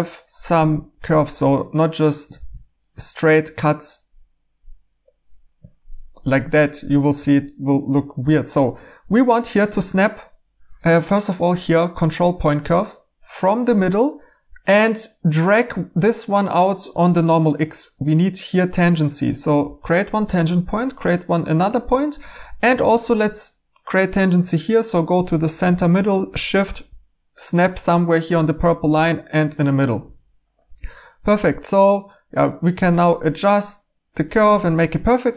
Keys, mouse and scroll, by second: 2.3 a, 7.2 x, 8.2 f, 10.8 Escape, 12.1-12.9 typing, 30.1 1, 34.5-35.3 typing.